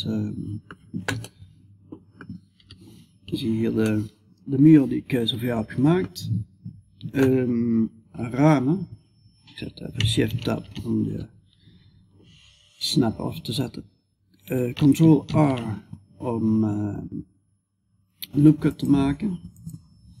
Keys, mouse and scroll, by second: 2.0 KP_5, 2.9 middle click, 3.6 middle click, 4.3 middle click, 5.7-14.7 middle drag, 14.7 ctrl+r.